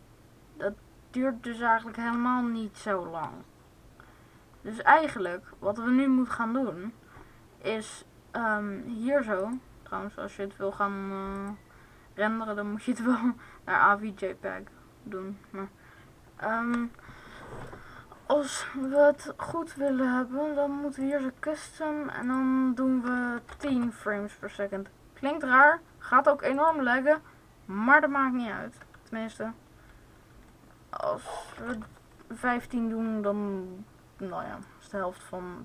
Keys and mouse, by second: 1.9 alt+a, 18.6-21.2 drag, 22.3-26.1 drag, 26.6-33.6 drag, 34.6-35.6 drag.